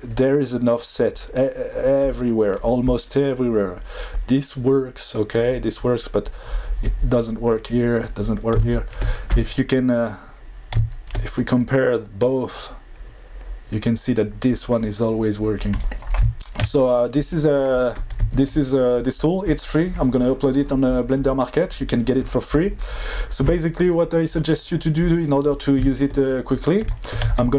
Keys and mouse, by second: 2.2 middle click, 8.5-9.0 shift+middle drag.